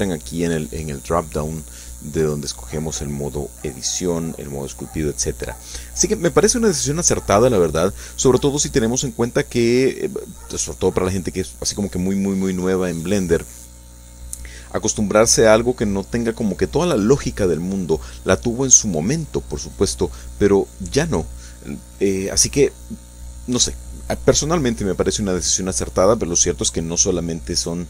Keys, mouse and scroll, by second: 0.1 click, 0.6-4.3 drag, 4.7-9.2 drag, 9.7 shift+click, 10.9 shift+click, 11.8 shift+click, 12.8 middle click, 14.0 middle click, 15.0 shift+click, 16.1 f, 16.6 click, 17.4 g, 18.2 click, 19.2 click, 20.4 click, 21.7 click, 22.1-23.4 drag, 23.6 click, 26.3 click.